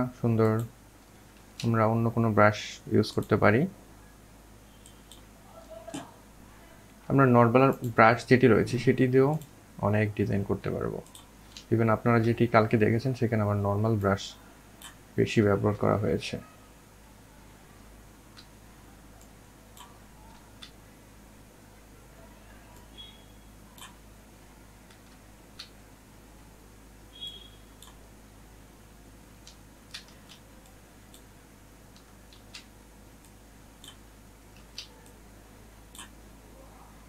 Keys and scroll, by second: 28.2 ctrl+alt+z, 30.5 ctrl+alt+z.